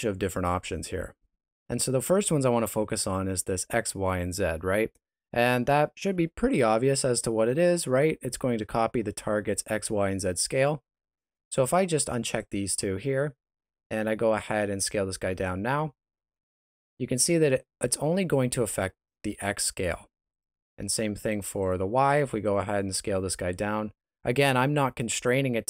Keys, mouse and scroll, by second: 11.6 click, 12.3 click, 14.3 right click, 15.3 s, 20.3 right click, 21.2 click, 21.6 click, 22.1 right click, 22.8 s.